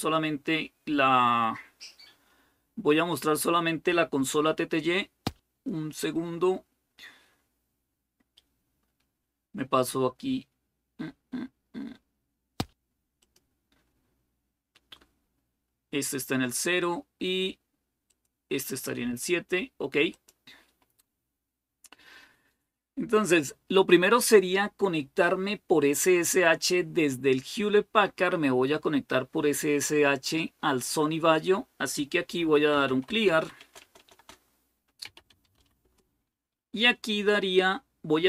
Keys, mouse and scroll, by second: 2.7-3.5 scroll down 1, 13.1 click, 18.0 click, 19.9-21.9 drag, 32.4-35.8 typing.